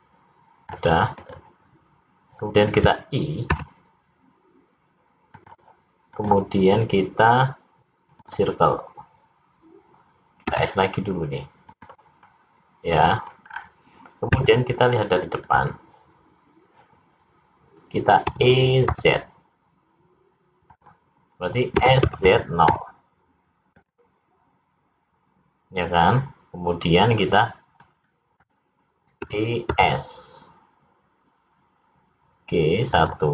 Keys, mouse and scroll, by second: 6.1 right click, 10.5 s, 12.3 middle click, 14.4 scroll down 4, 14.4 `, 18.4 e, 21.8 s, 27.7 middle click, 29.3 e.